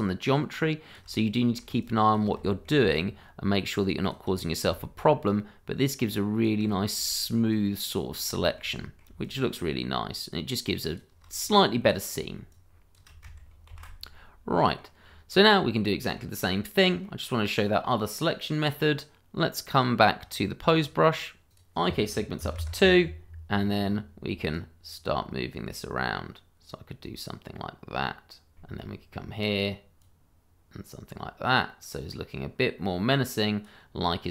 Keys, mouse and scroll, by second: 1.4 middle click, 1.9 click, 1.9 shift+click, 2.6 shift+middle click, 2.9 shift+click, 4.8 shift+middle click, 4.8 middle click, 5.0 shift+middle click, 5.3 click, 7.1 shift+middle click, 7.2 middle click, 7.3 shift+middle click, 7.5 click, 8.4 shift+middle click, 8.5 middle click, 9.2 shift+click, 9.3 click, 11.4-11.8 scroll down 1, 11.8 middle click, 12.5 shift+click, 12.6 click, 12.6 shift+click, 13.7 ctrl+\, 14.0-14.5 scroll down 1, 14.5 middle click, 15.0-15.4 scroll down 1, 15.4 middle click, 16.4-16.8 scroll down 1, 16.8 middle click, 19.8-20.9 scroll up 1, 20.9 click, 22.4 2, 22.6 Return, 24.2 click, 28.1 scroll down 1, 28.3 shift+middle click, 28.5 middle click, 30.0 click, 34.1-34.3 scroll up 1.